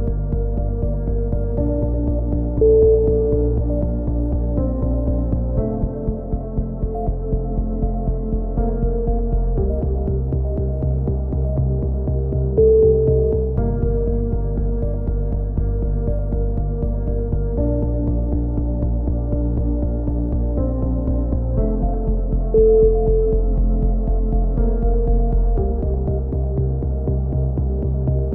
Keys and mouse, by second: 0.9-1.5 drag, 2.1 z, 4.0 KP_7, 4.3 z, 6.4 a, 6.7 z, 6.9 z, 9.0 ctrl+KP_3, 9.8 click, 10.9-15.7 drag, 12.4-15.1 right drag, 15.1 x, 17.9-21.4 drag, 18.4-23.2 right drag, 21.4 f, 21.4 a, 21.5 z, 23.2 click, 24.1 ctrl+z, 26.3 click.